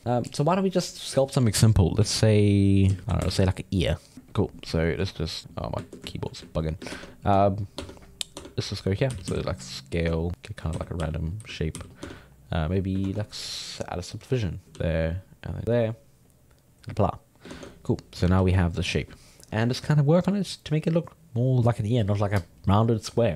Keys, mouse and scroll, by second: 0.0 ctrl+Tab, 1.6 alt+F14, 1.7 click, 2.0 x, 2.7 right click, 2.9 x, 3.0 shift+s, 3.3 shift+a, 4.3 ctrl+alt+middle click, 5.2-6.9 ctrl+middle drag, 6.9 ctrl+Tab, 7.8 Tab, 8.3 Tab, 8.4 middle click, 9.1 s, 10.3 alt+middle click, 10.5 alt+middle click, 10.7 z, 11.0 r, 11.4 z, 11.7 g, 12.0 Tab, 12.2 middle click, 13.0 ctrl+Tab, 13.7 click, 14.6 middle click, 14.7 shift+e, 15.6 ctrl+middle click, 16.3-17.5 drag, 17.5 ctrl+Tab, 18.2 g, 18.4 f, 18.8-21.9 middle drag, 22.4-23.3 drag.